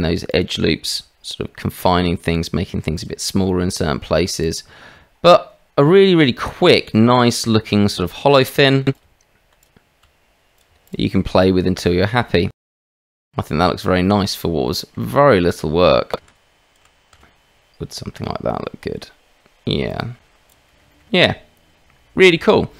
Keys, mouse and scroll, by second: 0.9 s, 3.3 Tab, 4.4 click, 7.0-7.4 drag, 7.6 shift+drag, 8.5 drag, 8.8 click, 8.9 Tab, 9.5 click, 10.0 s, 10.6 Tab, 11.3-11.8 drag, 12.2 shift+drag, 12.7-13.6 drag, 14.7 drag, 14.7 right drag, 15.3 Tab, 16.2 shift+z, 16.8 shift+z, 17.1 s, 20.1 Tab, 20.7 middle click, 20.9 shift+middle click.